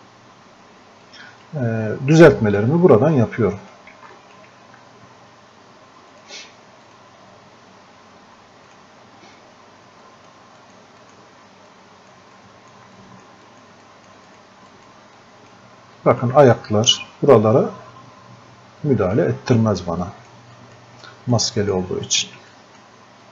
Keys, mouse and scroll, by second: 18.8-23.3 drag.